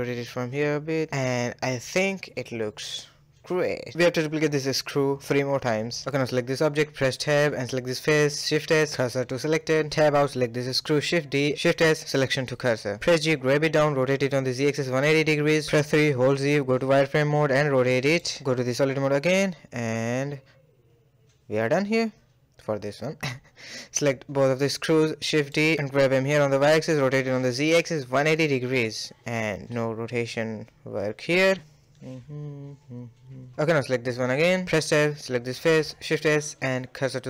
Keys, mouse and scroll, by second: 0.0 scroll down 2, 0.3-1.2 middle drag, 1.2-1.9 scroll down 1, 1.9 scroll down 2, 2.0-3.5 middle drag, 3.5-4.0 scroll down 1, 4.0-4.5 shift+middle drag, 4.5 Tab, 4.9 click, 5.5 click, 6.1 Tab, 6.3 click, 6.7 ctrl+z, 7.0 shift+s, 9.2 Tab, 9.3 click, 10.3 shift+d, 10.9 shift+s, 12.0 middle click, 12.3 g, 13.8 r, 14.1 g, 14.6 KP_3, 15.2-15.7 scroll up 4, 15.7 shift+middle drag, 15.9 z, 16.4 r, 18.2 z, 18.8-19.5 middle drag, 19.5 scroll down 2, 19.7-20.7 middle drag, 20.7 scroll down 1, 21.0-21.6 middle drag, 21.6-21.9 scroll down 1, 21.9-22.6 shift+middle drag, 22.6 shift+click, 23.1-24.3 shift+middle drag, 24.3 shift+d, 25.5 r, 26.9 g, 27.6 a, 27.7 a, 27.8-30.2 middle drag, 30.4 click, 31.1-31.7 scroll down 5, 31.7 a, 31.9 a, 32.1 scroll down 1, 32.3-33.2 middle drag, 33.2 scroll down 2, 33.4 shift+middle click, 33.8-34.2 scroll up 3, 34.2-34.6 shift+middle drag, 34.6 click, 34.8 Tab, 35.1 click, 35.9 shift+s.